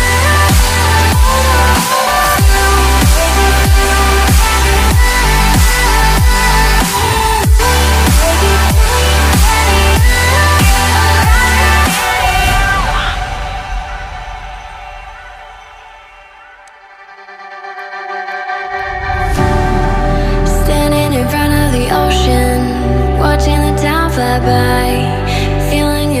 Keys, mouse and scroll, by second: 0.0 ctrl+click, 4.7 ctrl+click, 7.1 ctrl+click, 15.1 Escape, 17.4 right click, 22.3 ctrl+d, 25.1 ctrl+d, 25.6 ctrl+d, 25.9 ctrl+d.